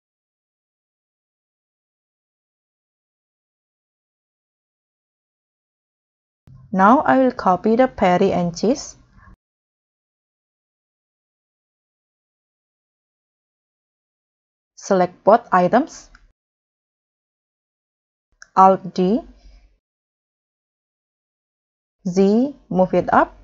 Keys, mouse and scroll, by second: 0.3 middle click, 0.8-1.2 scroll down 4, 1.5 middle click, 4.1-4.9 scroll down 5, 4.2 middle click, 5.3-5.7 scroll up 3, 6.2-7.0 scroll down 4, 7.1 scroll up 2, 7.2 middle click, 9.2-9.6 scroll up 1, 19.0 alt+d, 21.3 right click, 22.1 z.